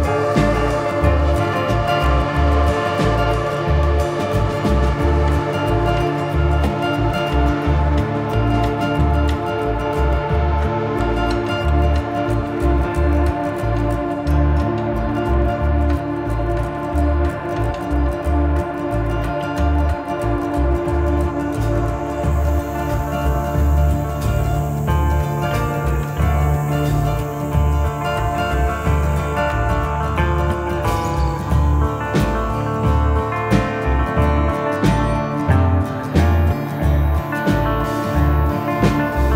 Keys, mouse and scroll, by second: 4.8 scroll up 1, 5.1 shift+middle click, 6.2 click, 12.4 middle click, 14.4 shift+middle click, 15.2 middle click, 15.7-16.2 scroll up 1, 16.2 shift+middle click, 19.6 click, 26.9 click, 34.2 middle click, 36.6-37.1 scroll down 2, 36.9 middle click.